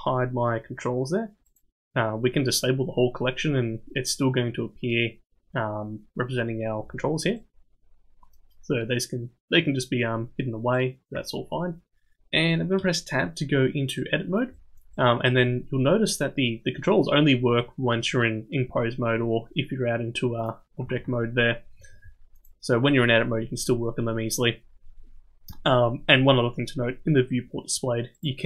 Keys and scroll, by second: 12.8 Tab, 15.3 Tab, 20.9 ctrl+Tab, 21.9 ctrl+Tab.